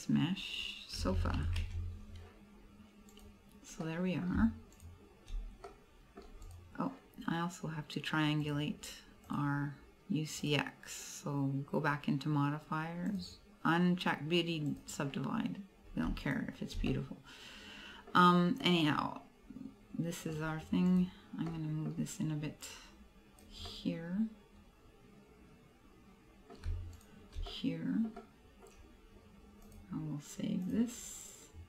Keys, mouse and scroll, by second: 2.6 scroll down 2, 3.2 right click, 3.9 middle click, 4.9 shift+right click, 5.7 middle click, 6.6 right click, 8.5 click, 9.3 click, 13.1 click, 14.7 click, 16.4 shift+right click, 16.9 middle click, 17.5 middle click, 18.3-18.7 scroll up 1, 18.7 middle click, 20.4 scroll down 1, 21.0 right click, 21.5 middle click, 22.7 click, 23.7 middle click, 27.1 shift+right click, 27.6 middle click, 28.3 middle click, 29.7 click.